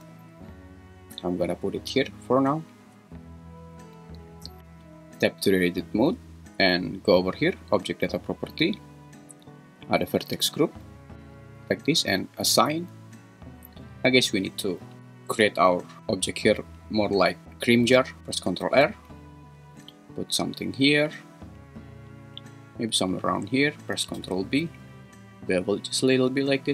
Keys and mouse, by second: 0.1 z, 5.2 Tab, 18.0 ctrl+r, 18.6 ctrl+r, 23.1 click, 24.2 ctrl+b.